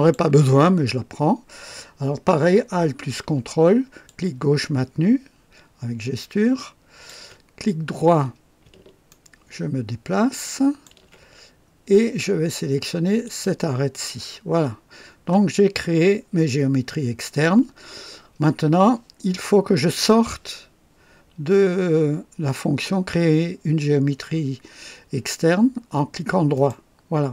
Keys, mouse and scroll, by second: 4.0-7.2 ctrl+alt+drag, 9.0-10.6 ctrl+alt+right drag, 10.6 ctrl+alt+click, 10.9 ctrl+alt+right click, 11.3-11.9 ctrl+alt+scroll up 2, 13.2 click, 14.5-15.0 scroll down 2, 26.5 right click.